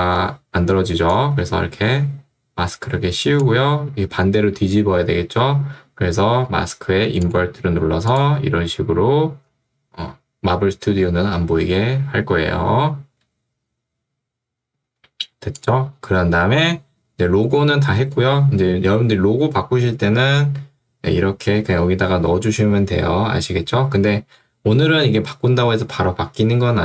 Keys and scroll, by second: 0.0 Escape.